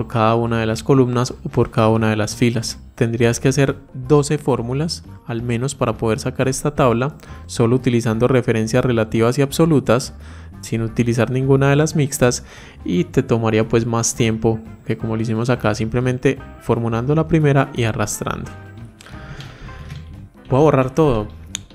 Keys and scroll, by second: 19.2 ctrl+shift+Down, 19.4 ctrl+shift+Right.